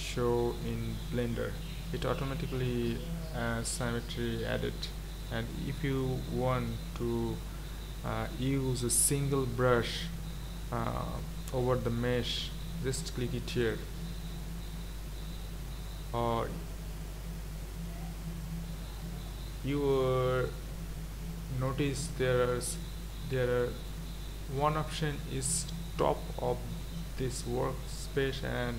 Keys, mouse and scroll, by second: 0.0-1.0 scroll up 6, 13.6 click, 22.0-28.7 drag.